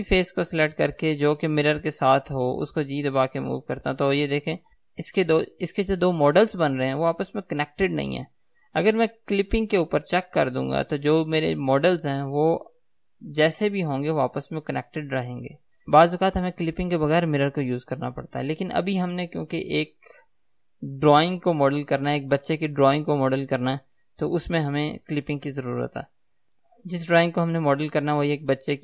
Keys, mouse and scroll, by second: 2.9 g, 8.7 right click, 10.9 click, 13.1 g.